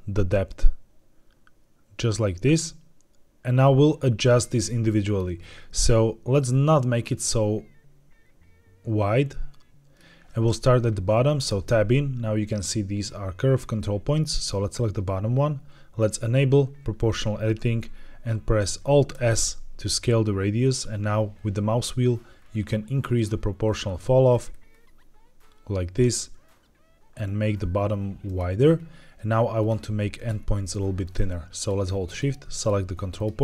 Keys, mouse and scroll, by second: 5.8-9.9 shift+drag, 11.4 Tab, 14.2 click, 15.9 click, 19.0 alt+s, 20.5-20.8 scroll down 2, 21.3-22.0 scroll down 5, 22.3-22.7 scroll down 3, 23.6-24.2 scroll down 3, 24.2-25.1 scroll up 4, 28.1 click, 28.6 scroll up 2, 29.5 click, 30.0 shift+click, 30.9 shift+click, 31.5 shift+click, 32.0 shift+click, 32.4 shift+click, 33.0 shift+click.